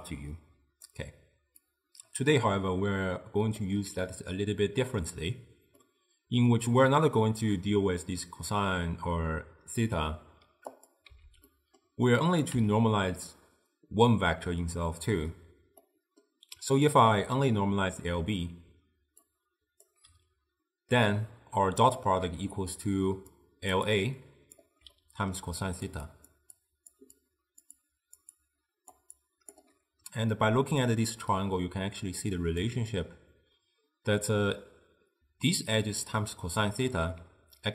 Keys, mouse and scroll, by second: 1.0-1.7 d, 1.8-3.6 drag, 3.6 d, 4.8 d, 5.9-8.9 middle drag, 10.8 click, 11.2 x, 11.6-12.3 middle drag, 12.3 click, 12.6 x, 15.9-18.8 middle drag, 18.8-20.8 typing, 19.3-19.9 right drag, 21.2-22.3 middle drag, 22.3-30.8 typing, 23.5 click, 24.0 click, 25.0-25.5 middle drag, 25.8 click, 26.2 click, 26.7 drag, 27.3 click, 27.9 click, 28.5 click, 29.3 click, 30.9-32.7 drag, 32.7 d, 35.3-37.7 typing.